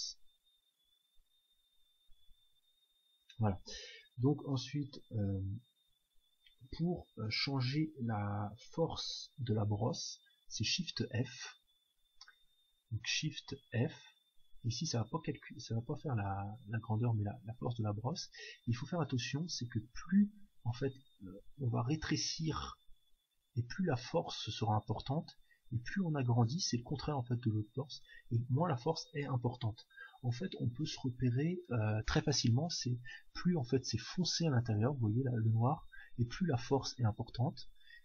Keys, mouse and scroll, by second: 14.1 shift+f.